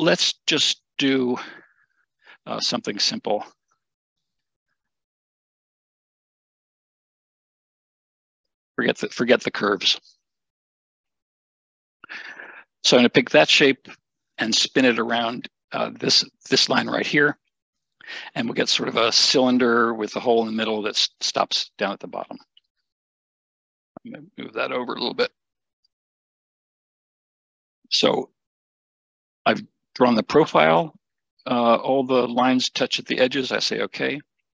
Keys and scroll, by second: 23.0 Escape, 24.7 Escape, 25.6 Escape.